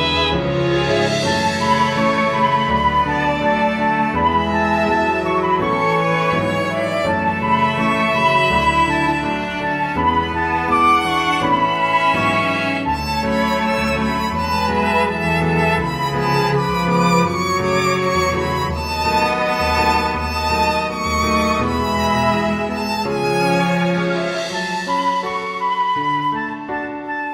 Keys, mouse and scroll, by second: 0.5 click, 2.0 click, 5.7 click, 8.5 click, 8.8 scroll down 1, 9.8 scroll down 9, 11.2 click, 13.1 click, 14.9 click, 15.8 middle click, 21.6 middle click, 23.7 scroll down 2, 24.2 middle click, 25.7 middle click, 26.6-26.9 scroll up 1, 26.9 middle click.